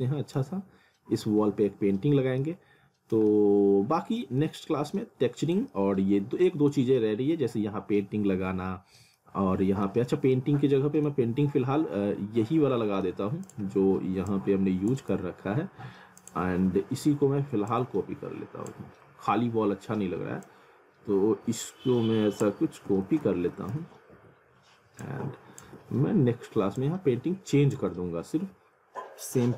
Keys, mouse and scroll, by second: 0.1 alt+middle click, 0.5 scroll up 1, 2.4 alt+middle click, 3.3 alt+middle click, 4.4 scroll up 1, 5.7 alt+middle click, 9.2 middle click, 10.4 middle click, 11.3 scroll up 1, 11.5 middle click, 12.2-12.7 alt+scroll up 1, 13.3 scroll up 1, 13.5 click, 15.2 ctrl+z, 16.2 ctrl+click, 16.5-17.1 scroll down 1, 17.7 shift+click, 22.8-25.6 typing, 23.3 alt+w, 25.0 click, 25.8-26.8 scroll down 1, 26.8 click, 27.8 z, 29.3 click.